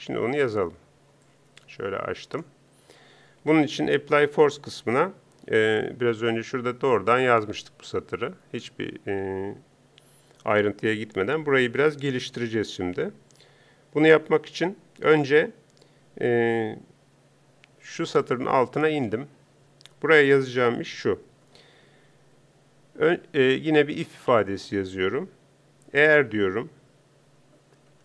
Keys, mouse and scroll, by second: 1.3-28.0 drag.